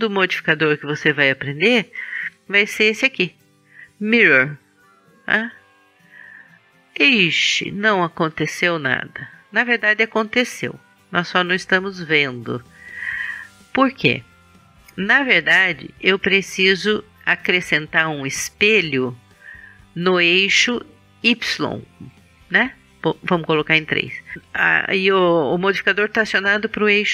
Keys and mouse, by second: 11.7 click, 12.1-20.8 middle drag, 22.9 KP_3.